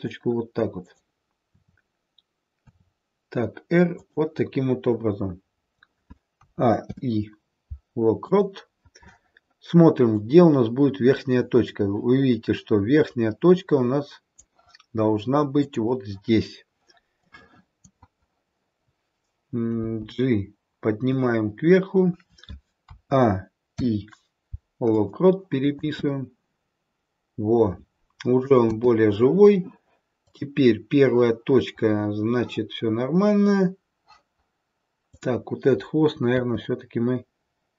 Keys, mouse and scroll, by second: 0.7 click, 1.8 e, 2.7 r, 6.3 a, 6.8 i, 10.0 click, 15.5 click, 17.1 click, 19.7 g, 22.9 a, 23.7 i, 25.7 space, 28.6 space, 30.2 click, 35.1 click, 36.2 r.